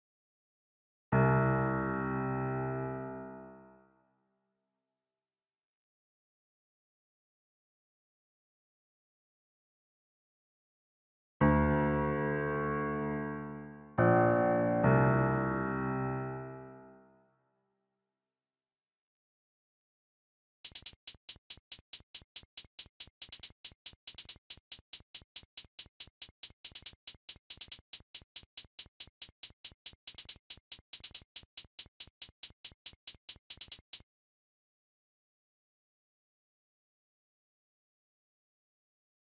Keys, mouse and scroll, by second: 15.2 F1, 16.9 F1, 35.2 F1.